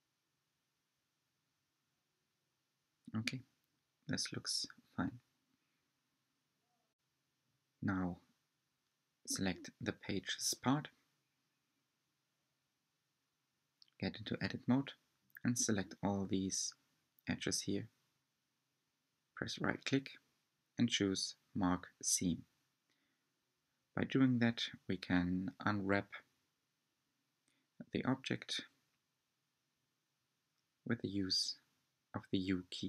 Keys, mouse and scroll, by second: 5.4 click, 6.1-7.5 middle drag, 7.4 scroll up 2, 8.6 shift+click, 9.1 shift+click, 9.9 shift+click, 10.6 shift+click, 11.2 shift+click, 11.9 shift+click, 15.3-15.8 right drag, 16.2-19.1 middle drag, 19.1 click, 20.1 shift+click, 20.6 shift+click, 21.2 shift+click, 22.2 shift+click, 22.9 shift+click, 23.2-24.7 right drag, 24.7-27.0 middle drag, 27.0 click, 28.5 shift+click, 29.1 shift+click, 29.8 shift+click, 30.3 shift+click, 30.9 shift+click.